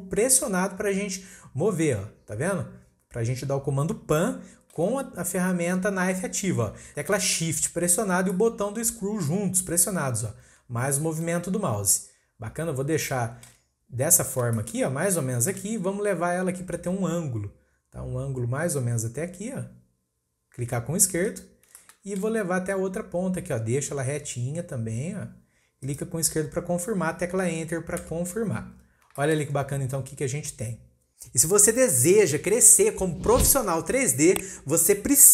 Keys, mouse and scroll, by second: 8.3-11.3 shift+middle drag, 14.5-17.6 shift+middle drag, 21.7-24.9 shift+middle drag, 28.7-29.1 scroll down 3, 29.1 shift+middle click, 29.5-32.5 scroll up 2, 32.5-35.3 scroll up 1.